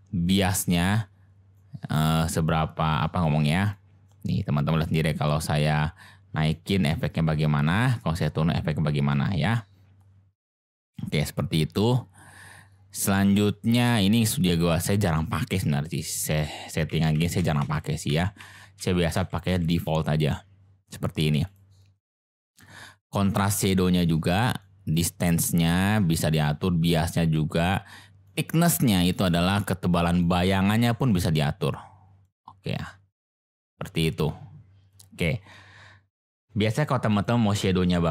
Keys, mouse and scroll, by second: 0.3 click, 1.5 click, 2.9 click, 3.8 click, 4.8 click, 6.5 click, 7.9 drag, 16.4 ctrl+z, 16.9 ctrl+z, 17.1 ctrl+z, 17.4 ctrl+z, 17.6 ctrl+z, 18.1 ctrl+z, 18.4 ctrl+z, 18.8 ctrl+z, 19.1 ctrl+z, 19.5 ctrl+z, 21.4 click, 23.4 click, 24.7 click, 26.2 click, 28.3 click, 30.3-32.2 drag, 33.2 click, 37.1 click.